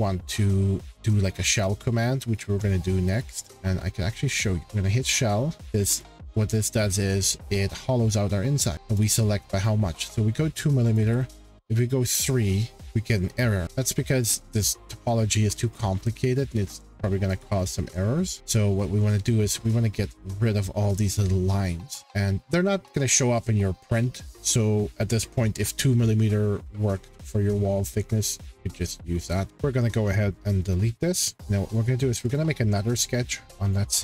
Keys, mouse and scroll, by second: 0.3-1.8 scroll, 2.3 shift+scroll, 3.2-3.6 scroll, 4.3 click, 4.7 click, 4.7 scroll, 6.0 click, 9.0 click, 9.4 2, 10.9 click, 11.0 3, 15.0-15.8 scroll, 18.4 click, 20.9-22.0 drag, 29.5 Page_Up, 30.7 click, 31.4 Delete, 32.3 click, 33.7 click.